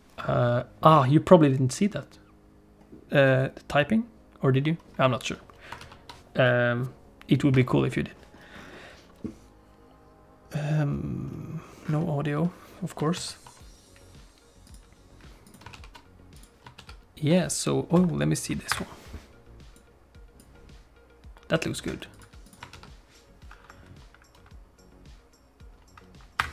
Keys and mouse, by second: 5.8 ctrl+s, 13.2 ctrl+s, 15.4 click, 15.7 ctrl+s, 16.4 click, 16.8 ctrl+s, 18.0 F11, 19.9 f, 22.4 click, 22.7 ctrl+s.